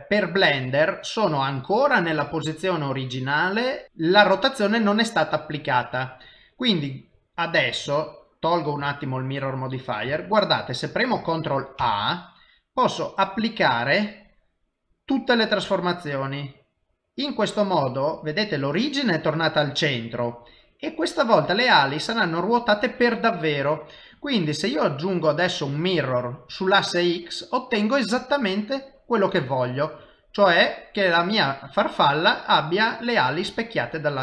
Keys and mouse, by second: 8.3 click, 9.4 middle click, 10.1 shift+middle click, 10.7 middle click, 11.8 ctrl+a, 21.1 middle click, 21.6 middle click, 24.2 click, 26.7 middle click, 29.5 shift+middle click, 30.1 middle click.